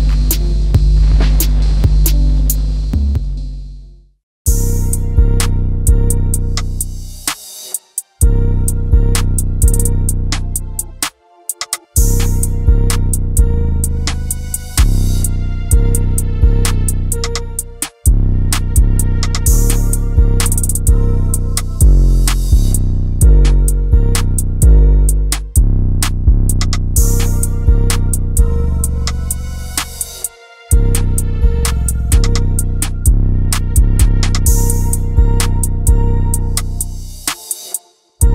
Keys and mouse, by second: 1.0 s, 2.7 click, 5.0 Tab, 5.9 click, 6.7 e, 7.5 click, 7.7 e, 8.4 click, 8.6 e, 9.1 click, 9.2 e, 9.9 click, 10.7 click, 11.3 e, 12.0 click, 12.2 e, 12.8 click, 13.3 click, 13.3 e, 13.4 e, 13.7 click, 13.9 e, 14.5 click, 15.9 click, 15.9 e, 17.0 e, 17.5 click, 17.7 e, 18.5 click, 19.4 click, 19.4 e, 19.6 e, 20.8 click, 21.1 e, 22.1 click, 22.4-24.8 typing, 22.9 click, 23.5 click, 24.0 click, 24.7 click, 25.6 click, 27.3 f, 29.3 click, 31.9 click, 36.3-36.8 drag.